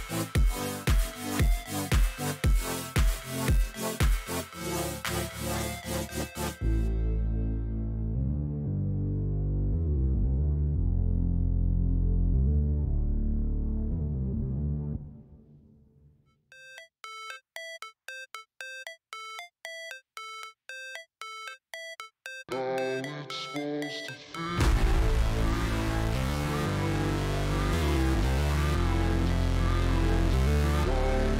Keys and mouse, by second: 0.6 alt+shift+click, 3.1 click, 5.6 alt+shift+click, 7.2 click, 8.4 alt+shift+click, 8.8 alt+shift+click, 9.9 click, 10.7 click, 11.2 alt+shift+click, 11.8 alt+shift+click, 12.5 alt+shift+click, 13.3 click, 14.1 alt+shift+click, 14.6 click, 15.1 alt+shift+click, 15.8 click, 16.6 alt+shift+click, 17.3 click, 18.0 alt+shift+click, 18.6 alt+shift+click, 18.8 alt+shift+click, 20.0 alt+shift+click, 20.2 alt+shift+click, 20.6 click, 22.1 alt+shift+click, 23.6 click, 25.9 click, 26.6 click, 27.1 click, 28.4 click, 30.2 click.